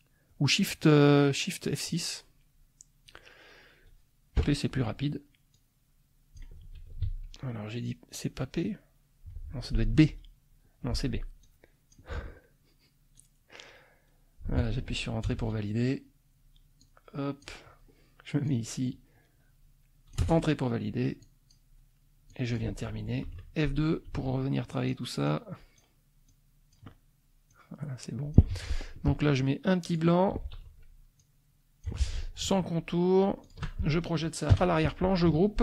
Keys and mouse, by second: 4.4 p, 5.5-6.5 drag, 7.0 ctrl+z, 10.0 b, 11.4 click, 13.1-14.8 drag, 15.3 Return, 16.8 click, 18.5-20.3 drag, 20.2 Return, 21.2 click, 22.3 click, 23.3 F2, 24.1 ctrl+a, 24.7 ctrl+click, 25.2 click, 26.3 click, 27.5-28.5 drag, 28.5 F1, 29.9 click, 30.5 F2, 31.2 click, 31.9 F1, 33.4 shift+click, 34.5 End.